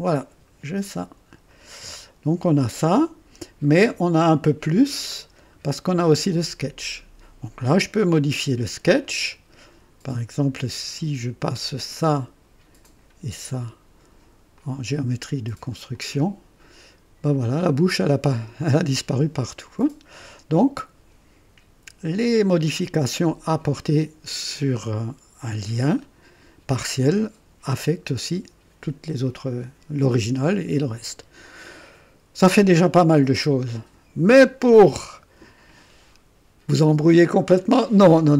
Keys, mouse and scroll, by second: 1.4 click, 2.2 typing, 4.2 click, 5.2-5.5 scroll down 1, 6.2 click, 9.0 click, 11.7 click, 12.8 click, 14.5 click, 15.9 click, 18.2 typing, 22.5 click.